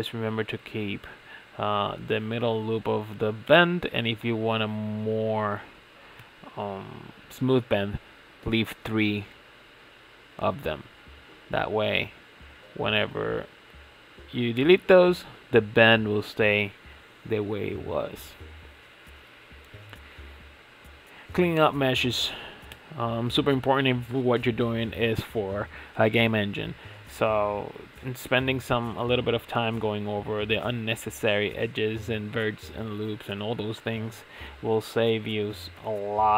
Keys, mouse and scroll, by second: 0.8 alt+shift+click, 2.0 alt+shift+click, 2.4 alt+shift+click, 2.7 alt+shift+click, 4.3 ctrl+x, 5.1 ctrl+z, 5.4 ctrl+z, 7.0 alt+shift+click, 7.5 alt+shift+click, 9.4 shift+middle click, 10.1 alt+shift+click, 10.6 alt+shift+click, 11.0-13.2 shift+middle drag, 13.2 alt+shift+click, 13.4 alt+shift+click, 13.8 alt+shift+click, 14.2 alt+shift+click, 14.8 ctrl+x, 15.1 scroll down 3, 15.3-16.9 shift+middle drag, 16.9 scroll up 5, 17.2-19.2 middle drag, 19.2 alt+click, 19.6-20.8 middle drag, 20.8 alt+shift+click, 21.2-22.5 middle drag, 22.5 ctrl+x, 23.3 ctrl+z, 23.5 scroll down 3, 23.8-25.0 shift+middle drag, 25.0 alt+click, 25.5 alt+click, 26.4 middle click, 27.2 alt+shift+click, 27.8 alt+shift+click, 28.2-29.8 shift+middle drag, 29.8 alt+shift+click, 30.2 middle click, 30.7 ctrl+z, 30.9-31.4 scroll up 6, 31.4 alt+shift+click, 31.9 alt+shift+click, 32.8 middle click, 33.5 alt+shift+click, 33.8 scroll down 3, 34.1-35.5 middle drag, 35.5 ctrl+x, 35.9-36.3 shift+middle drag.